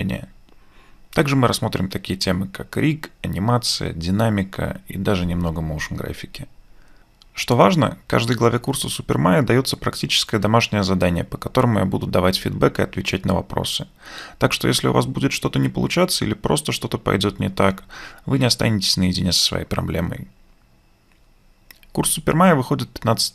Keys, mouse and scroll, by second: 0.2 BackSpace, 0.4 ctrl+space, 0.7 alt+click.